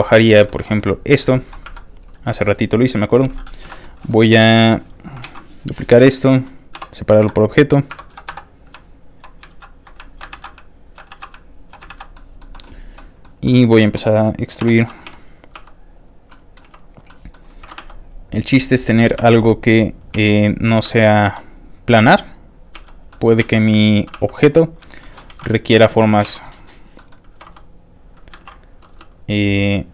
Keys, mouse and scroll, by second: 0.2 alt+middle click, 0.3 scroll down 1, 0.4 middle click, 0.6 shift+middle click, 1.0 click, 1.3 shift+middle click, 1.8 shift+Tab, 2.3 shift+click, 2.3 2, 3.7 l, 3.8 middle click, 5.3 shift+d, 5.5 click, 5.7 middle click, 6.1 shift+middle click, 6.2 scroll up 2, 6.8 p, 6.8 click, 7.3 Caps_Lock, 7.4 click, 8.0 Tab, 8.5 shift+click, 8.9 alt+shift+click, 9.7 ctrl+alt+x, 10.0 alt+click, 10.4 ctrl+alt+x, 10.7 alt+click, 11.2 ctrl+alt+x, 11.4 ctrl+alt+click, 11.9 ctrl+x, 12.1 ctrl+alt+middle click, 12.5 middle click, 12.7 click, 12.9 middle click, 13.5 middle click, 14.7 o, 15.2 e, 15.3 click, 15.6 r, 15.9 click, 16.3 middle click, 16.7 e, 16.8 click, 17.1 middle click, 17.7 r, 18.6 click, 18.8 middle click, 19.2 r, 19.9 click, 20.2 e, 20.4 click, 20.9 r, 21.7 click, 22.0 r, 22.5 click, 22.8 e, 22.9 click, 23.1 middle click, 23.5 e, 23.7 click, 24.2 r, 24.8 click, 25.0 shift+middle click, 25.4 shift+e, 26.1 click, 26.3 q, 26.7 click, 26.9 middle click, 27.4 e, 28.0 click, 28.4 ctrl+z, 29.0 z, 29.6 click.